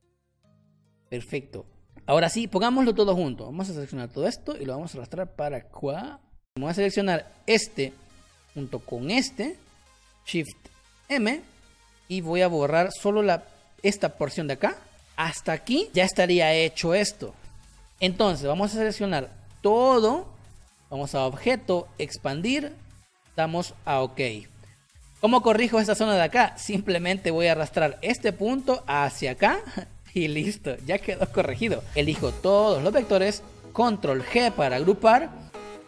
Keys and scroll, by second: 1.2 v, 2.3 space, 11.1 shift+m, 14.9 space, 25.4 space, 34.2 ctrl+g, 35.4 Delete.